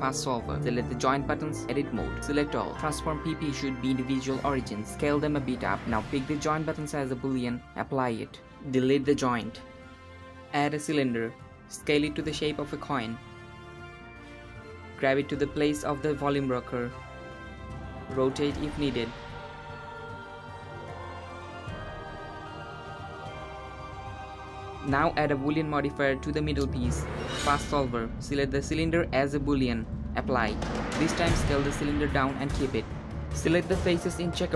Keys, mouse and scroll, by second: 0.2 click, 0.9 Tab, 1.5 a, 2.3-4.0 drag, 4.0 s, 5.9-6.9 drag, 6.9 shift+z, 7.0-8.4 drag, 8.6 x, 9.7 shift+a, 13.4 s, 14.5 g, 15.4 KP_7, 16.3-17.1 shift+middle drag, 17.1 g, 19.1 r, 21.1 s, 22.8 g, 25.2-25.7 middle drag, 25.7 click, 26.8 click, 27.9-30.1 drag, 30.1-30.5 scroll up 2, 30.5 s, 32.8 shift+click, 33.6 shift+click, 34.1 shift+click, 34.3-34.5 middle drag.